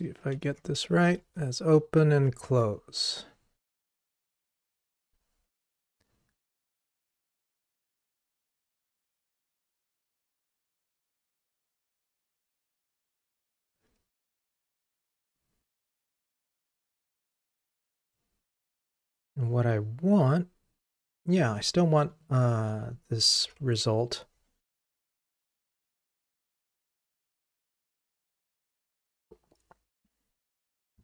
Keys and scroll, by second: 23.4 ctrl+r.